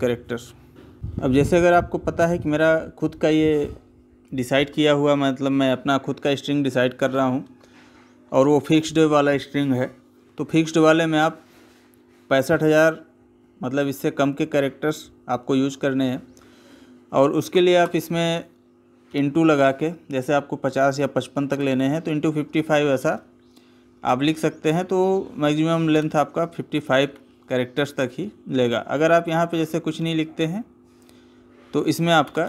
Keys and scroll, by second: 10.9 space, 17.6 space.